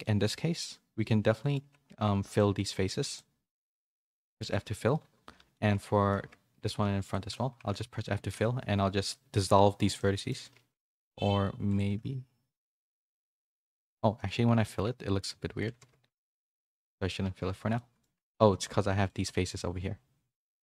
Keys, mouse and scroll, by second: 0.0 middle click, 1.0 middle click, 1.6 Tab, 1.9 2, 2.3 alt+click, 3.1 alt+click, 3.5 middle click, 3.8 f, 4.2 middle click, 4.4 Tab, 5.3 /, 5.5 middle click, 6.2 Tab, 6.5 2, 7.0 alt+click, 7.6 f, 8.4 x, 9.9 middle click, 10.5 ctrl+z, 11.1 1, 11.9 g, 13.2 middle click, 13.7 3, 13.8 click, 14.6 middle click, 15.8 ctrl+z, 17.7 middle click, 18.4 3, 19.0 alt+click, 19.4 x.